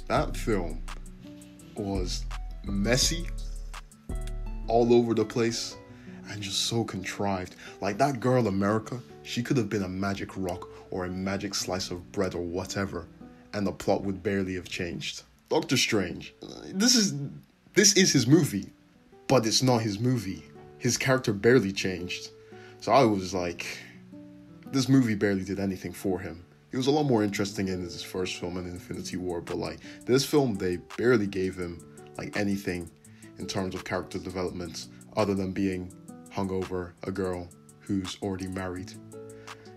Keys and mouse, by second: 0.1 ctrl+z, 0.9 ctrl+z, 2.1 f, 3.9 ctrl+z, 4.2 ctrl+z, 4.4-6.9 shift+middle drag, 6.9 click, 7.2-8.4 middle drag, 7.6 f, 8.3 `, 8.4-12.4 drag, 8.7 `, 10.3 `, 12.4-18.1 shift+middle drag, 18.4 `, 19.3 alt+z, 21.2 c, 23.9 s, 25.0-26.6 middle drag, 26.6 click, 26.7 middle click, 27.1-31.8 drag, 29.0 c, 30.7 s, 31.8-35.3 middle drag, 32.4 r, 33.8 g, 35.3 ctrl+click, 35.4 ctrl+z, 36.5 click, 36.9 click, 37.7 g, 39.4 click.